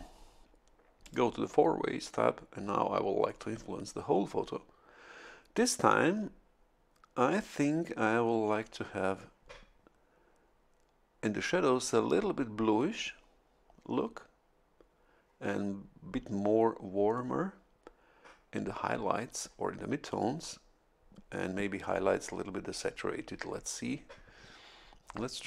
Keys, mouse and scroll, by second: 1.0 click, 2.6-2.9 scroll down 1.